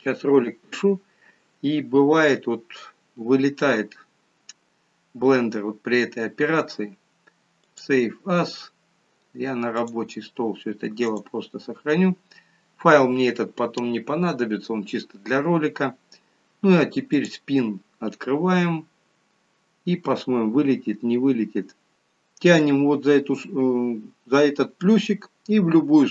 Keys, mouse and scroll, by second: 17.2 click.